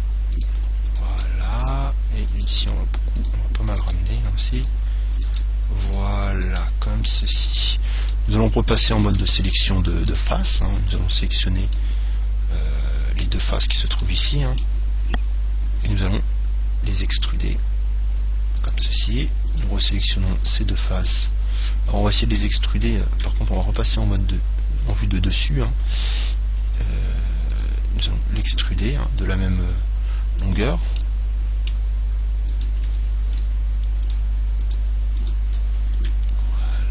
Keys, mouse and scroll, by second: 0.6-4.7 drag, 1.1-4.7 right drag, 1.1 g, 2.7 g, 4.1 g, 5.5 g, 6.7 g, 8.3 click, 8.3-10.2 middle drag, 9.4 ctrl+Tab, 10.9 right click, 12.0-13.7 middle drag, 13.8 right click, 14.2-16.1 middle drag, 15.8 e, 19.0 click, 19.8-22.6 right drag, 22.6 KP_1, 23.9 KP_7, 25.2-27.6 middle drag, 27.8 e, 30.7 click, 31.2-33.0 middle drag, 32.8-36.9 right drag.